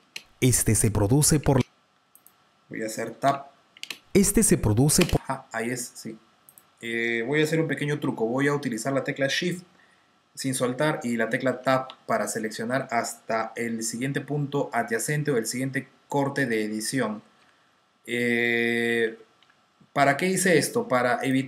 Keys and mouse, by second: 1.9 click, 2.8 click, 4.5 Tab, 4.5 click, 4.5 space, 4.9 space, 6.4 click, 7.1 click, 7.1 space, 8.1 click, 8.1 space, 11.4 shift+Tab, 16.5 typing, 18.2-19.3 typing.